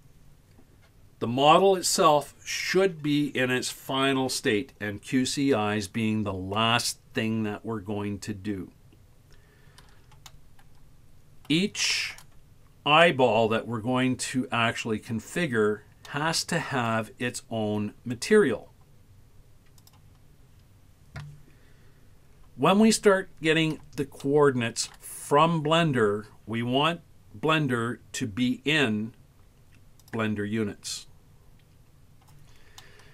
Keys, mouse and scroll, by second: 10.3-11.5 middle drag, 11.9 shift+middle drag, 12.5-14.4 scroll up 4, 16.1-17.0 middle drag, 18.2-19.8 right drag, 19.8 click, 24.2-25.0 shift+middle drag, 30.1-32.8 drag, 32.8-33.1 middle drag.